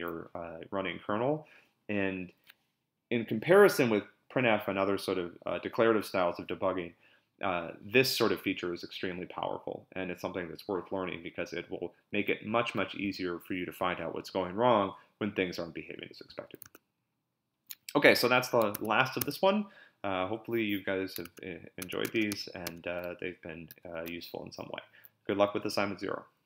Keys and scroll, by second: 16.6 super+Tab, 18.7 Tab, 21.2 super+Tab.